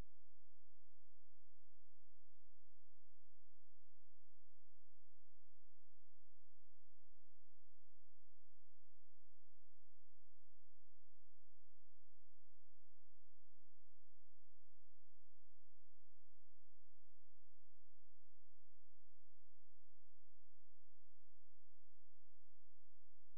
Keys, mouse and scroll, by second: 2.9 click, 4.4 click, 5.1-6.8 drag, 8.5-11.4 drag, 12.0-15.0 drag, 15.8 click, 17.0-19.9 drag.